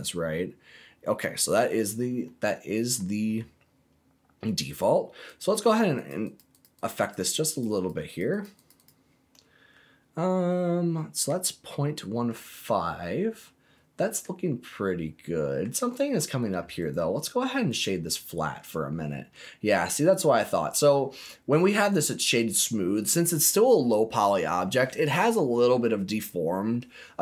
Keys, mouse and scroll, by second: 1.7-2.2 scroll up 3, 2.2 middle click, 5.2 click, 5.6 click, 5.9 click, 6.2 click, 6.5 click, 6.7 click, 6.9 click, 7.2 click, 7.4 click, 7.7 click, 8.0 click, 8.2 click, 8.5 click, 8.7 click, 9.3-12.3 middle drag, 12.5 scroll up 1, 13.0-14.2 middle drag, 14.2-14.6 scroll down 2, 14.6 middle click, 15.7 right click, 16.7 right click, 17.7 right click, 18.6-19.4 scroll down 2, 19.4-20.8 middle drag, 21.1 right click, 22.5 middle click.